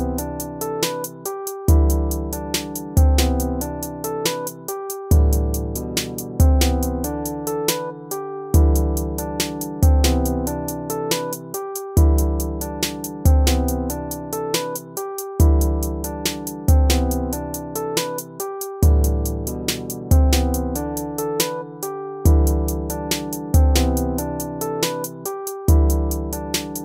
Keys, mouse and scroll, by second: 1.2 ctrl+-, 3.6 ctrl++, 7.5 ctrl+-, 8.1 ctrl++, 8.4 ctrl++, 16.9 ctrl+-, 17.2 ctrl++, 18.7 ctrl+-, 25.9 ctrl+-.